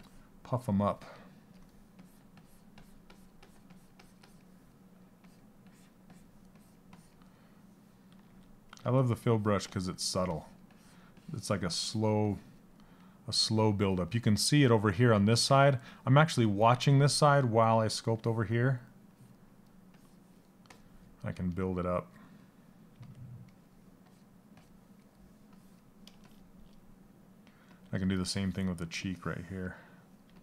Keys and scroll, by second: 27.3 s, 29.8 s.